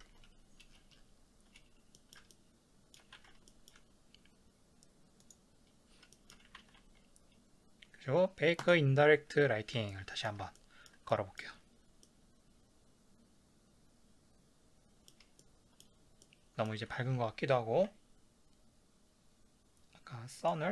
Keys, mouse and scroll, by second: 0.7 scroll down 1, 2.0-9.2 shift+middle drag, 3.3 ctrl+s, 6.7 ctrl+s, 9.2-9.9 drag, 9.9-20.5 shift+middle drag, 20.5 click.